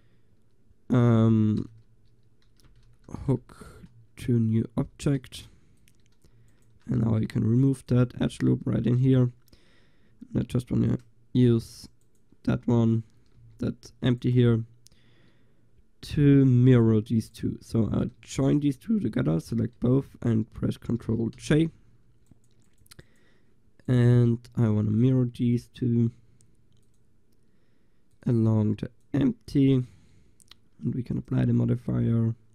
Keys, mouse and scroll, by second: 3.1 o, 6.6-8.7 drag, 7.0 x, 8.7 Tab, 9.0-10.2 drag, 10.8-11.9 drag, 13.5 g, 21.4 ctrl+j, 25.0-30.0 drag, 30.0 middle click, 31.2-32.3 drag.